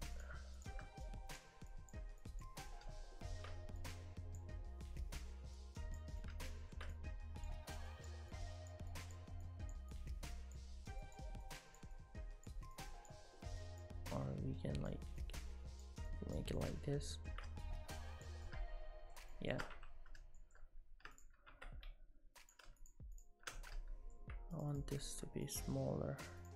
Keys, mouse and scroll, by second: 0.2 click, 1.1 click, 1.7 click, 2.2 click, 2.7 middle click, 3.8 click, 5.0 middle click, 5.6 click, 6.2 middle click, 6.9 click, 7.9 click, 8.9 click, 11.0 click, 11.4 click, 12.8 click, 16.1 click, 16.6 middle click, 17.6 click, 18.5 middle click, 19.3 shift+middle click, 19.8 Tab, 20.4 shift+middle click, 21.2 click, 21.5 Tab, 22.4 click, 22.8 shift+click, 23.2 click, 23.6 middle click, 24.6 shift+click, 24.7 shift+click, 25.0 shift+middle click, 25.5 shift+click, 26.4 shift+click.